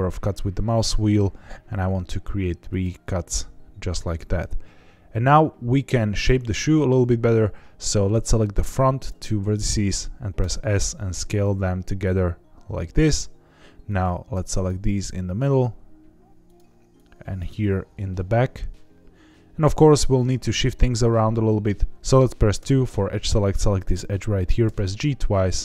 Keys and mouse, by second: 4.0 right click, 7.4-9.0 drag, 10.3 s, 12.9 click, 13.8 click, 15.0 s, 16.4 click, 16.9 click, 17.5 s, 20.1 click, 21.9 2, 21.9 1, 22.5 2, 24.8 g.